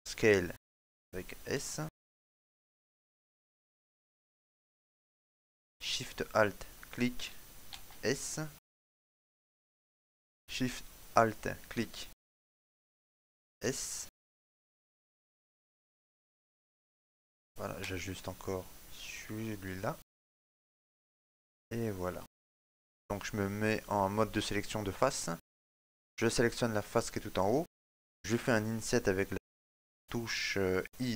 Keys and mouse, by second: 3.6 right click, 4.2 alt+shift+right click, 4.2 s, 5.7 right click, 7.2 alt+shift+right click, 8.4 s, 9.9 shift+middle click, 11.0 right click, 12.3 alt+shift+right click, 14.0 s, 16.3 right click, 16.8 alt+shift+right click, 18.5 s, 20.6 shift+middle click, 21.5 shift+middle click, 21.6 middle click, 22.4 shift+middle click, 22.9 click, 26.5 right click, 27.1 middle click.